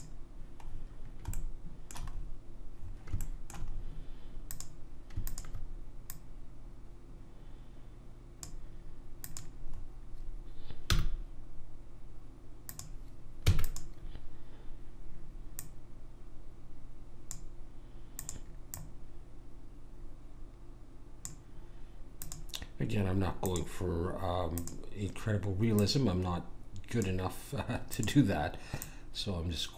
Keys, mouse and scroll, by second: 0.6-2.2 middle drag, 4.5-7.9 drag, 4.5-6.0 right drag, 9.2 click, 10.8 g, 13.4 e, 15.6 click, 22.2-27.6 drag.